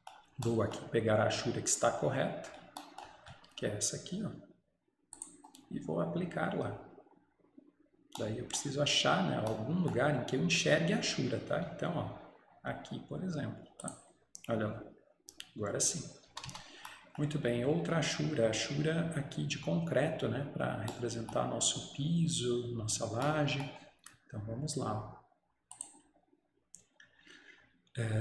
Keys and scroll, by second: 16.4 Escape, 16.6 Escape.